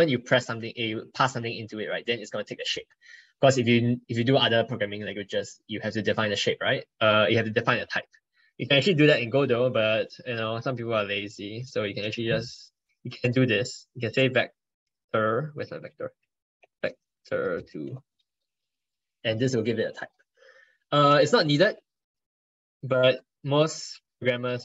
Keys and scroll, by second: 7.7 ctrl+Left, 22.4 ctrl+BackSpace, 23.3 ctrl+BackSpace.